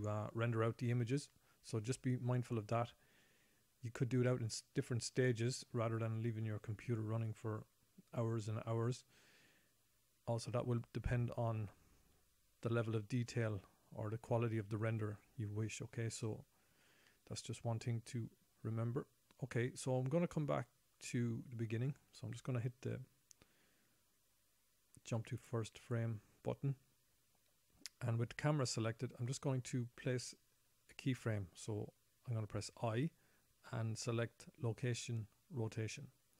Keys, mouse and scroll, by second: 4.7 middle click, 14.9 click, 16.1-16.6 scroll down 1, 16.6 shift+middle click, 22.2 click, 32.0 i.